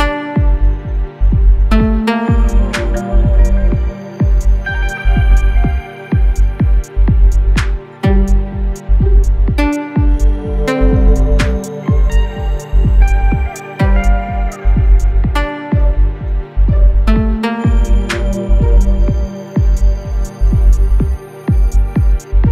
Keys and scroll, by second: 1.7 Escape, 3.2 shift+g, 3.4 shift+f, 6.7 Escape, 8.4 Escape, 10.7 F1, 11.0 F2, 13.4 Delete.